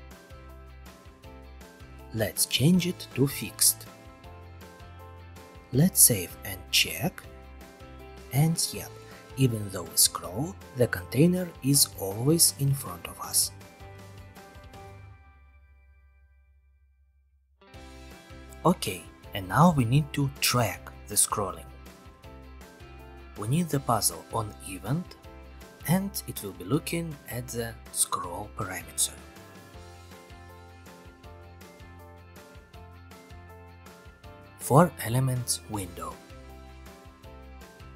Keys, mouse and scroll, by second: 1.2 click, 1.8-3.6 typing, 2.8 click, 3.9 Return, 5.4 click, 6.0 click, 6.3 ctrl+r, 7.4-12.9 scroll, 7.5 middle click, 16.0 click, 17.3-18.3 middle drag, 18.5 click, 20.7-21.7 drag, 25.0 click, 25.6-26.0 typing, 26.8-27.8 drag, 30.2-31.3 ctrl+drag, 30.8 ctrl+c, 31.0 ctrl+v, 32.3 middle click, 34.4 click, 34.9 click, 35.9 click, 36.6 scroll.